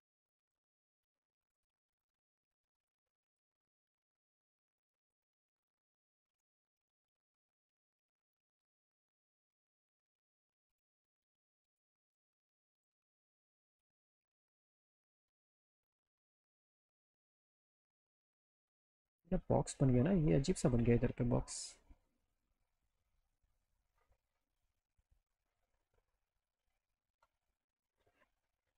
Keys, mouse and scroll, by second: 0.6 scroll up 2, 1.5 ctrl+z, 2.5 click, 4.0 click, 6.4 F4, 7.3 click, 9.9 click, 10.9 alt+middle click, 11.9 ctrl+z, 12.1 ctrl+z, 12.3 ctrl+z, 13.0 ctrl+z, 13.9 click, 16.3-17.3 alt+drag, 18.1 click, 20.3-22.1 alt+middle drag, 23.8 click, 25.1 click, 26.5 alt+middle click.